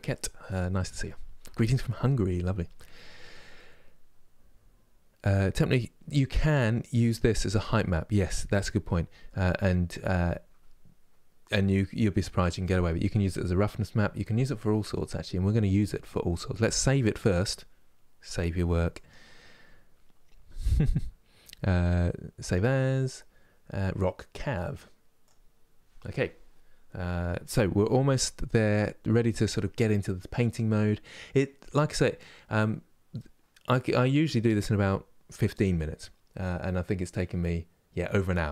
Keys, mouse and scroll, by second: 6.9-38.5 drag.